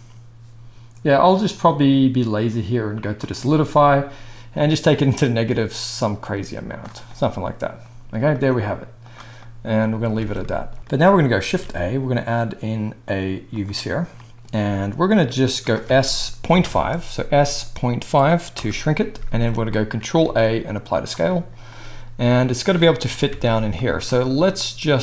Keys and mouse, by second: 3.2-24.0 middle drag, 10.1 alt+a, 11.4 shift+a, 15.8 s, 20.2 ctrl+a, 23.0 g, 24.0-25.0 drag.